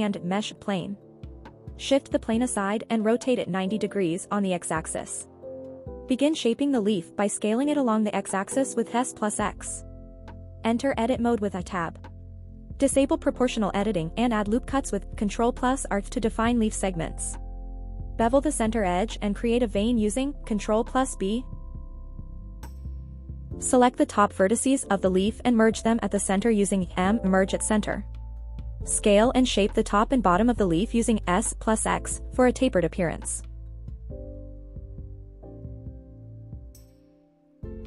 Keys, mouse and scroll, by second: 0.9 g, 1.3 y, 1.7 x, 2.5 click, 2.9 shift+middle drag, 3.7-5.3 typing, 5.8 Return, 6.7 shift+middle drag, 7.7 s, 8.0 x, 9.8 click, 10.4 Tab, 12.0 click, 12.7 ctrl+r, 14.1 right click, 15.0 ctrl+r, 15.9 right click, 16.3 shift+middle click, 16.7-17.1 scroll up 1, 17.5 shift+middle click, 18.6 alt+click, 19.7 ctrl+b, 21.9-22.4 scroll up 1, 23.0 click, 24.2 click, 24.7 scroll up 1, 25.1 click, 26.5 m, 27.5 click, 29.0 s, 29.2 x, 31.9 click, 32.3 shift+middle click, 33.1 click, 34.1 s, 36.1 click, 36.5 shift+middle click, 37.3 middle click.